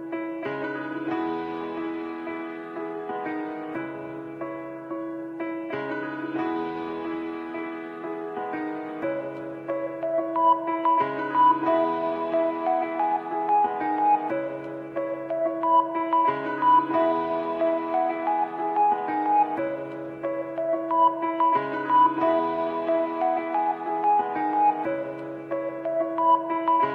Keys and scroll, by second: 20.2 shift+F2, 20.8 F3, 22.4 Escape, 23.6 Delete.